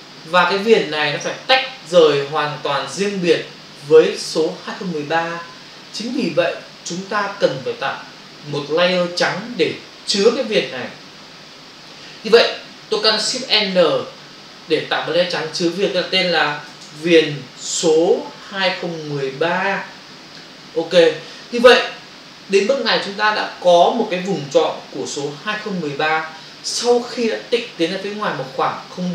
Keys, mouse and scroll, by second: 13.8 ctrl+shift+n, 17.7-18.5 typing, 20.7 Return.